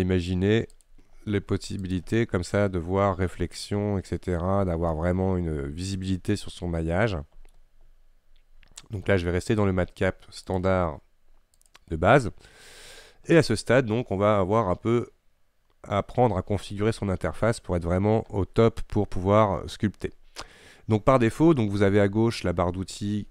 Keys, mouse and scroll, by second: 5.0-7.6 middle drag, 7.6 scroll up 1, 7.9-11.8 middle drag, 11.8 click, 12.4 middle click, 12.4 scroll down 1, 13.2 scroll down 2, 13.5-14.3 scroll up 1, 14.3-18.0 scroll up 1, 18.0-23.3 scroll up 1.